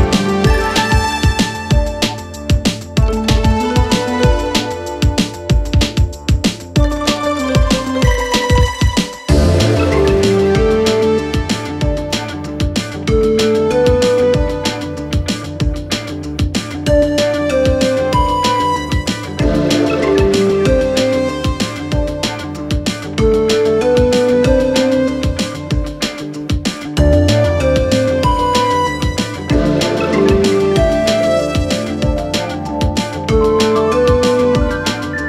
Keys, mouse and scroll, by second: 7.6 click, 10.6 click, 11.2-14.8 alt+shift+drag, 19.3 click, 22.6-29.1 drag, 29.1-32.0 drag.